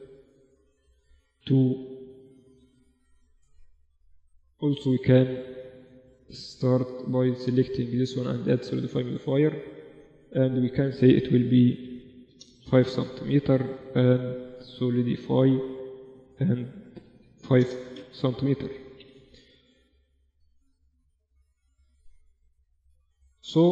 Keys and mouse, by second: 1.4-2.9 middle drag, 2.9 click, 3.6 right click, 3.8 middle click, 4.7 right click, 5.0 middle click, 5.4-7.4 drag, 8.2 ctrl+a, 11.6 click, 13.8-17.6 drag, 13.8 right click, 18.4 ctrl+Up, 20.2-22.1 typing.